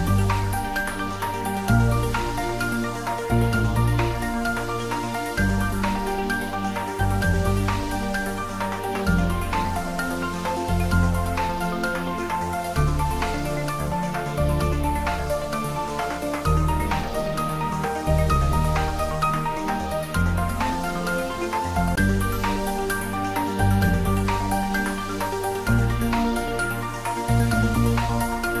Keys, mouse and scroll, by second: 1.2 click, 8.7 scroll down 1, 9.0 click, 9.4-11.9 middle drag, 11.4 ctrl+z, 11.9 ctrl+z, 12.3-13.6 scroll up 2, 13.6-14.8 scroll up 1, 16.1 ctrl+b, 19.6 click, 20.4-21.4 scroll down 1, 21.4-22.6 scroll up 1, 22.9-26.6 drag, 26.9 middle click, 27.9-28.4 scroll down 1, 28.4 click.